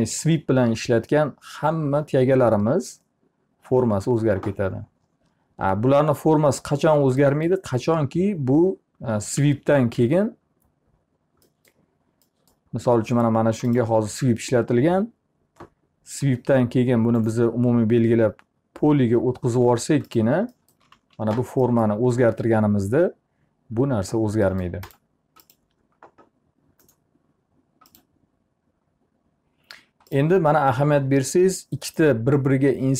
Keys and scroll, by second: 8.8 t, 9.4 z, 10.1 alt+a, 20.5 z.